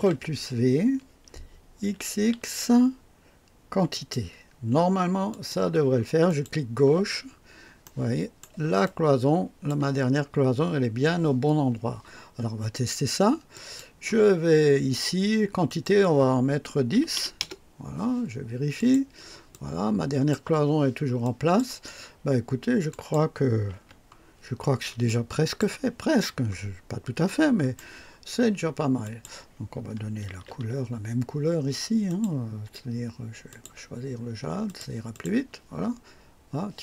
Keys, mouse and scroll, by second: 1.8 x, 3.9 click, 5.3 click, 6.2 click, 7.2-7.6 scroll up 1, 7.8-8.6 right drag, 8.8-9.8 drag, 10.2-11.0 scroll down 2, 12.1 typing, 13.5 click, 15.6 click, 16.9 KP_1, 17.1 KP_0, 17.4 KP_Enter, 18.7 click, 19.5-20.5 drag, 21.2 click, 22.9 click, 23.8 &, 24.3-25.0 scroll down 1, 25.0-25.8 drag, 25.6 typing, 26.7 scroll up 1, 26.7-27.3 typing, 27.2-27.9 right drag, 29.0 click, 30.3 ctrl+d, 32.1 click, 33.5 click, 34.6 click, 35.1 click.